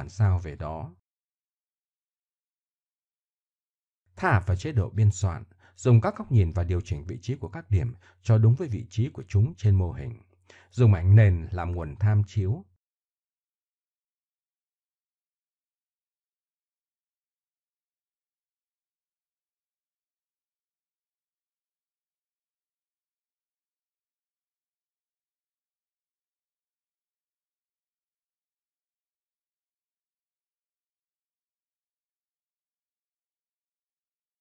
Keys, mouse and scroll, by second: 1.5 right drag, 1.7 Tab, 2.1 Tab, 2.8 Tab, 4.3 KP_3, 5.0 ctrl+KP_3, 9.2-10.4 drag, 10.4 middle click, 12.4 click, 12.6 middle click, 13.4-14.2 drag, 14.2-14.7 middle drag, 17.4-18.5 middle drag, 18.5 Tab, 21.7 z, 21.9 z, 23.0 KP_1, 24.3-25.4 drag, 25.5 Tab, 27.0 click, 28.4 g, 30.7 click, 32.3 g.